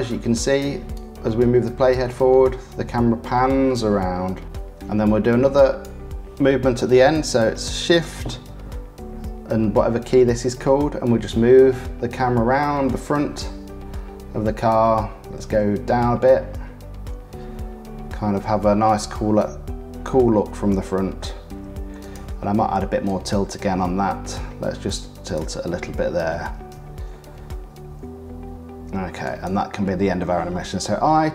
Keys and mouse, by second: 0.2 click, 0.9-2.5 drag, 2.7 click, 4.0-5.8 drag, 8.4 shift+`, 23.0-25.4 middle drag, 26.5 shift+`, 30.8 i.